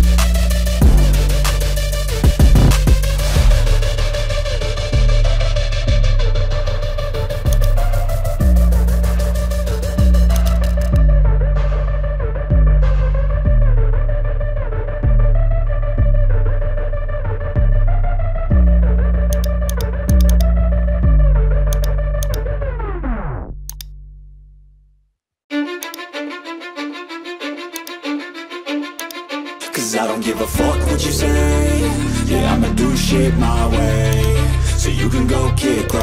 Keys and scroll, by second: 0.0-6.5 typing, 9.5-11.6 typing.